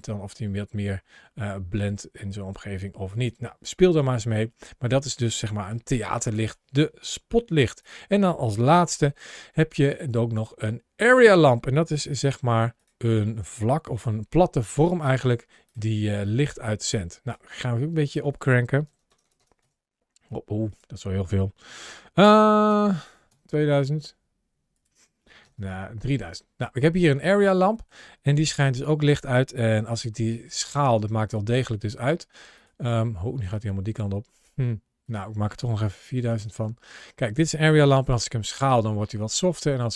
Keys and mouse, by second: 4.8-5.1 middle drag, 5.5 g, 6.1 click, 6.4 middle click, 7.4 x, 8.5 shift+a, 11.9 s, 12.6 click, 13.1 middle click, 13.8 r, 14.0 r, 15.5 click, 16.0 click, 17.8-19.4 drag, 18.9 KP_0, 19.2 KP_0, 20.5-23.1 drag, 22.7 KP_0, 22.8 KP_0, 24.5-25.8 drag, 25.4 KP_0, 25.5 KP_0, 27.3 middle click, 28.4 g, 28.9 click, 29.6 s, 31.1 click, 31.5 s, 32.4 click, 33.4 click, 34.8-36.2 drag, 35.8 KP_0, 36.0 KP_0, 37.7 s.